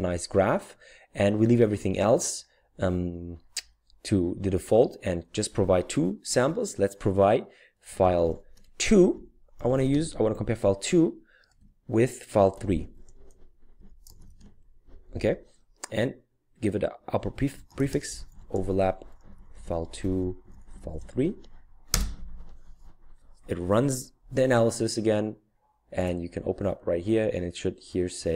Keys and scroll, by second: 7.6-14.8 typing, 17.5-21.0 typing, 21.9 Return.